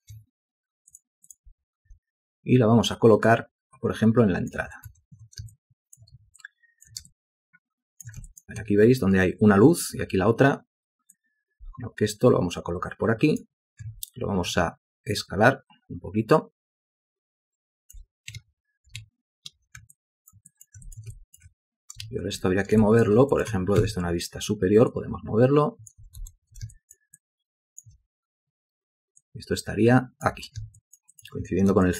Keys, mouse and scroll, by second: 0.1 shift+double click, 2.0 w, 5.0 shift+a, 5.7 ctrl+alt+click, 6.5 shift+click, 7.2 ctrl+click, 8.4 shift+click, 14.0 r, 18.5 space, 19.1 ctrl+space, 20.1 alt+click, 20.6 alt+click, 21.0 ctrl+alt+click, 21.1 ctrl+alt+double click, 21.3 alt+shift+click, 22.2 ctrl+space, 23.0 ctrl+alt+click, 23.5 shift+click, 23.9 w, 25.4-26.3 typing, 26.9 ctrl+alt+click, 27.3 ctrl+alt+click, 30.9 ctrl+alt+click, 31.3 ctrl+alt+click, 31.4 ctrl+alt+double click.